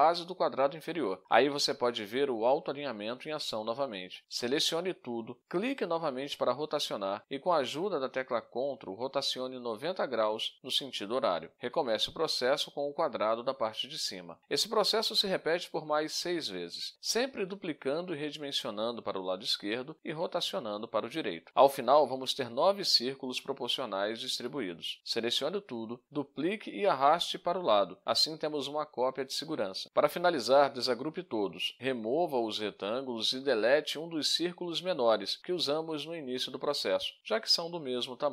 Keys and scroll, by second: 11.1 ctrl+d, 13.3 ctrl+d, 15.8 ctrl+d, 18.4 ctrl+d, 21.1 ctrl+d, 23.4 ctrl+d, 25.6 ctrl+d, 31.5 ctrl+u, 32.7 Delete, 34.4 Delete, 34.9 Delete, 36.3 Delete, 36.8 Delete, 37.3 Delete, 38.1 Delete.